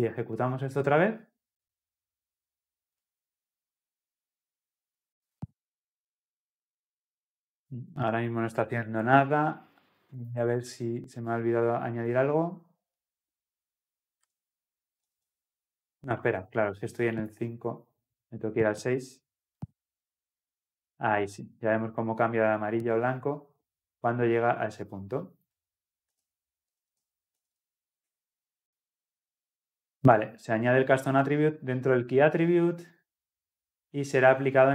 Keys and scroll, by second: 0.9 ctrl+F10.